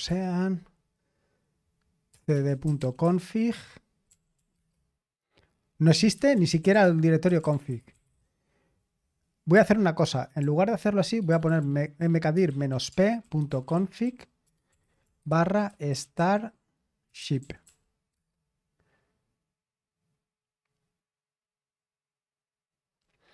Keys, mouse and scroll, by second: 0.0-0.3 typing, 1.8-4.5 typing, 5.9-8.5 typing, 10.4-18.6 typing.